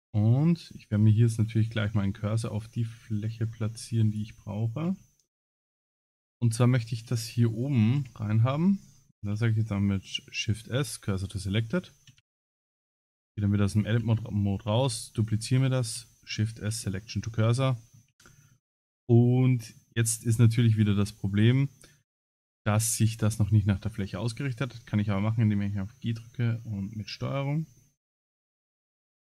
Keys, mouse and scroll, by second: 0.4 scroll up 3, 0.8 middle click, 1.6 shift+middle click, 2.0 middle click, 3.5 scroll down 4, 4.9 Tab, 6.3 3, 6.5 click, 7.1 shift+click, 8.0 KP_Decimal, 8.5-9.0 scroll down 10, 9.3 shift+s, 11.8 shift+middle click, 12.2 Tab, 13.1 click, 14.7 shift+d, 15.9 shift+s, 17.7 shift+middle click, 18.2 scroll up 5, 18.7 shift+middle click, 19.5 middle click, 19.9 middle click, 24.4 g, 27.8 shift+middle click, 29.0 middle click.